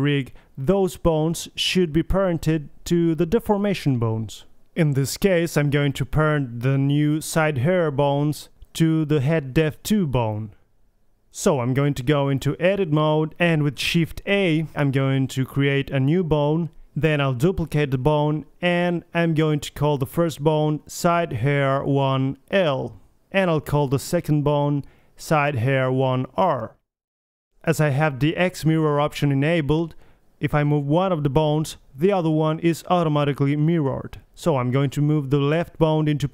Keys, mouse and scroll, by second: 0.3-1.4 middle drag, 2.0 middle click, 3.0 middle click, 3.7 click, 4.8-6.5 middle drag, 6.8-7.9 middle drag, 7.9 scroll up 1, 8.6 KP_3, 8.8-9.2 middle drag, 9.2-10.1 scroll up 1, 10.8-11.6 middle drag, 11.6 right drag, 11.7 click, 12.0 KP_1, 12.2 KP_3, 12.5 Tab, 12.8 a, 13.3 click, 13.9 KP_1, 14.5 shift+a, 16.2 click, 16.4 shift+d, 16.8 click, 18.1-19.1 drag, 20.2 middle click, 20.6-21.6 drag, 21.6-24.5 middle drag, 24.5 ctrl+c, 25.2-26.9 drag, 27.3-28.6 drag, 28.6 middle click, 28.7-30.3 right drag, 28.9 g, 30.5 middle click, 30.8 middle click, 34.2 middle click, 34.4 middle click, 35.0 KP_3, 35.8 g.